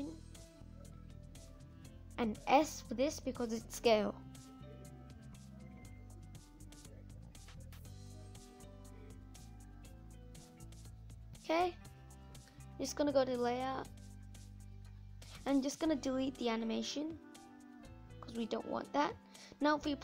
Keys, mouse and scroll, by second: 8.8-10.0 drag, 10.0 middle click, 10.8 click, 11.0 scroll up 2, 11.0-12.6 middle drag, 12.6 click, 13.3 middle click, 14.0 scroll down 2, 15.9 Delete, 16.5 scroll up 3, 16.7-20.0 middle drag.